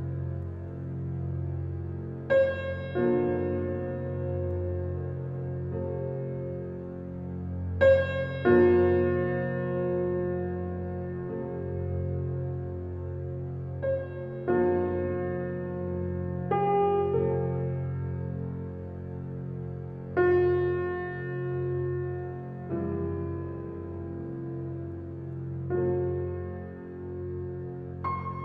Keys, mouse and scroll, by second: 1.5 Tab, 2.0 click, 2.3-3.1 middle drag, 3.1 Tab, 3.3 Tab, 3.5 Tab, 4.0 click, 4.3 click, 4.8 click, 6.3 ctrl+z, 6.7 click, 7.7 shift+click, 8.1 click, 9.7 click, 10.0 click, 10.3-11.4 middle drag, 11.4 x, 13.0 click, 13.3 click, 13.5 click, 14.3 ctrl+z, 14.5 ctrl+z, 14.8 ctrl+z, 15.0 ctrl+z, 15.5 click, 16.0 click, 17.1 x, 18.0 click, 18.9 g, 20.9 middle click, 21.8 click, 22.4-22.8 ctrl+z, 23.0 ctrl+z, 23.1 ctrl+z, 23.3 ctrl+z, 23.4 ctrl+z, 24.1 shift+middle click, 24.9 shift+click, 25.2 shift+click, 25.9 g.